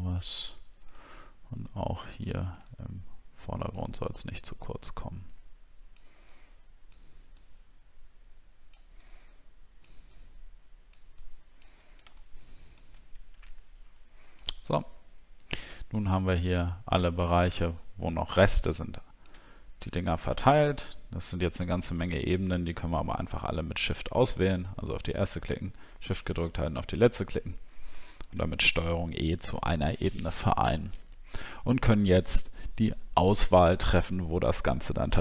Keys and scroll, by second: 28.5 ctrl+e.